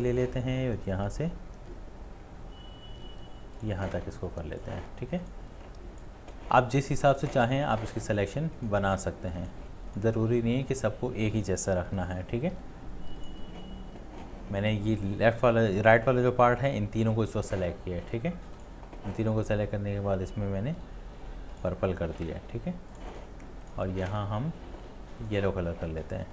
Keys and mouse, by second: 8.6 right click, 11.9 right click, 12.1 shift+click, 13.3 shift+click.